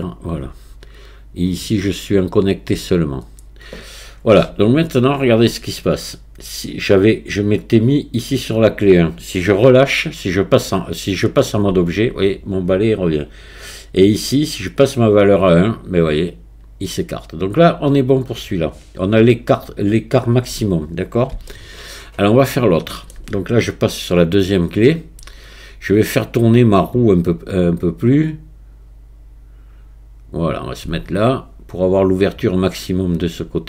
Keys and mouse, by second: 1.4-2.8 drag, 11.7 Tab, 14.8-20.3 drag, 21.5-23.1 shift+middle drag, 27.6-30.5 drag.